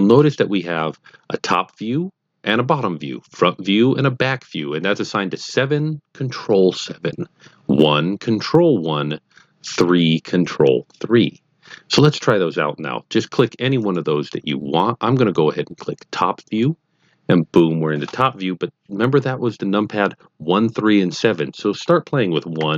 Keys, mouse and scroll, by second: 13.8 click, 16.6 click, 22.5-22.7 typing.